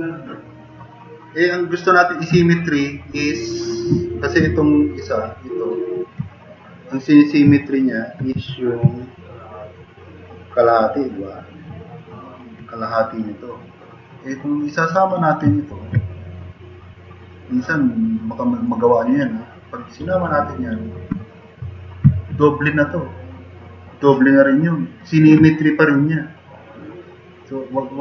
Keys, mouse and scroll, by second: 11.8-12.2 drag.